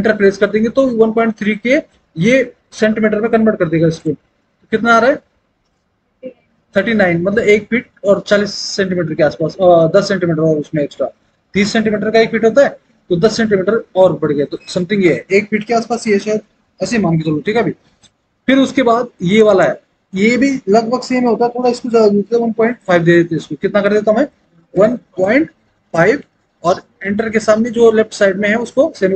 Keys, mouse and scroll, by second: 4.1 Return, 24.8 KP_1, 26.3 KP_5.